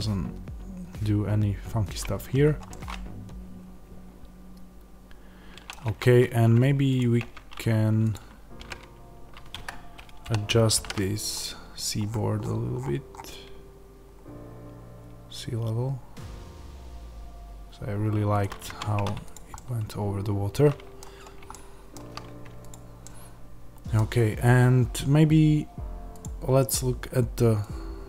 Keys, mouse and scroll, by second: 2.6-6.9 middle drag, 5.6 scroll, 5.8 Tab, 6.9 click, 7.1 Tab, 8.0 click, 8.5 g, 9.6 Escape, 10.1 o, 18.3 click, 18.6 Tab, 19.2 click, 19.5-22.6 middle drag, 22.6 click, 23.0-27.7 middle drag, 27.7-28.0 drag.